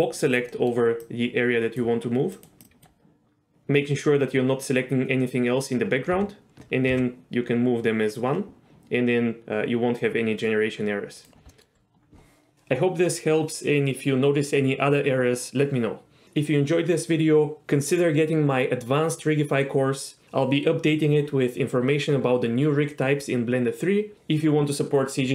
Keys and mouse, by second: 0.6 middle click, 1.1 click, 2.5 click, 2.7 click, 6.2 h, 7.0 g, 11.5 middle click.